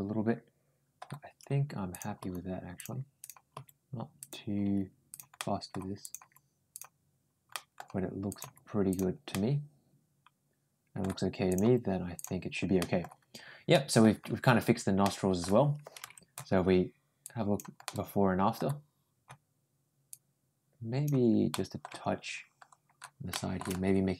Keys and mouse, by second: 1.7 click, 2.0 g, 3.0 click, 3.4 g, 4.4 g, 5.2 middle click, 5.8 click, 6.0 g, 7.3 middle click, 8.1 click, 8.7 g, 9.1-10.8 middle drag, 11.3 click, 11.4 g, 12.6 middle click, 13.5 middle click, 14.8 middle click, 15.8 Tab, 17.0 click, 17.7-18.4 middle drag, 20.0 click, 21.3 middle click, 21.7 Tab, 23.1 middle click.